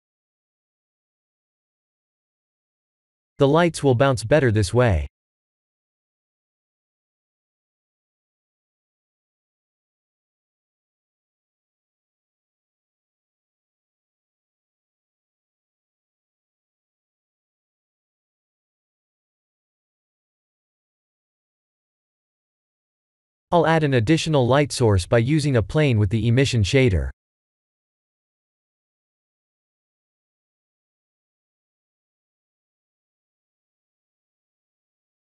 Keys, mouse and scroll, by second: 0.5 Tab, 1.2 shift+z, 1.7 middle click, 6.0 middle click, 6.4 KP_0, 9.5 Tab, 10.2 click, 11.1 ctrl+b, 14.0 Tab, 15.1 right click, 16.4 shift+z, 20.1 click, 20.8-21.5 scroll down 5, 21.5 click, 21.9 middle click, 22.6 middle click, 22.9-23.8 scroll down 4, 23.8 middle click, 25.1 middle click, 25.4 shift+a, 31.2 g, 32.8 r.